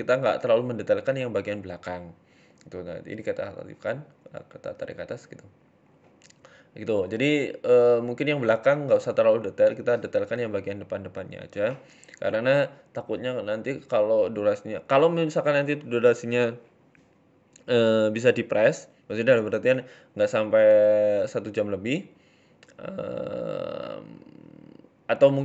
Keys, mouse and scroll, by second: 1.3-1.6 scroll up 3, 1.8 click, 3.0 click, 3.6 g, 5.1 shift+middle click, 6.5-7.1 scroll down 4, 6.7 shift+middle click, 7.1-7.5 scroll up 1, 7.5 ctrl+r, 8.7 click, 9.4 g, 10.8 z, 11.7 z, 12.7 Tab, 12.8 middle click, 13.5 scroll down 3, 13.7 middle click, 14.4 KP_7, 14.9 shift+middle click, 15.1 Tab, 17.7-18.7 scroll down 3, 17.9 z, 18.7-19.0 scroll up 2, 18.9 shift+middle click, 20.0 click, 21.1 right click, 21.4 alt+shift+right click, 22.1 right click, 22.3 alt+shift+right click, 24.9 s.